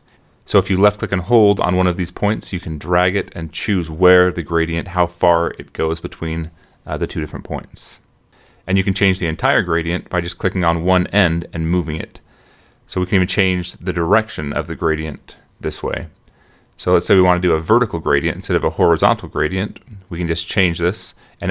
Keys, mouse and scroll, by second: 1.0-2.4 drag, 3.0-4.4 drag, 5.2 click, 5.5 click, 5.8 middle click, 6.4 click, 8.7 click, 9.3 click, 10.3-13.7 drag, 13.8 click, 14.9-16.3 drag, 16.4 middle click, 17.5-18.9 drag, 19.8-21.5 drag.